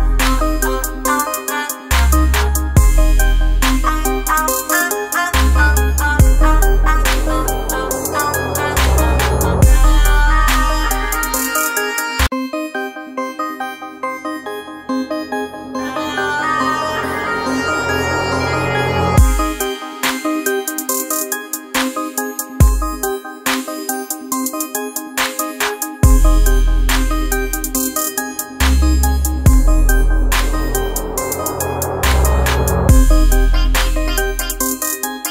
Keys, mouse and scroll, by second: 3.4-5.5 drag, 10.3-15.8 drag, 16.3 alt+scroll down 1, 16.7 space, 16.8 click, 17.4 alt+scroll down 1, 17.8 space, 17.9 click, 18.3 space, 18.5-21.5 ctrl+drag, 21.5 space, 21.8 click, 22.0 space, 26.3 click, 29.3 right click, 30.2-35.3 drag, 35.2 typing.